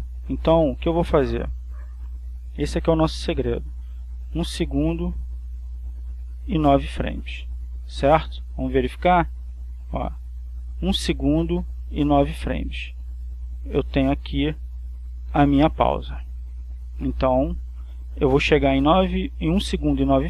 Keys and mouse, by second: 1.3-2.8 drag, 4.3-7.0 drag, 9.2 click, 10.4 click, 11.0 click, 16.4-18.2 drag.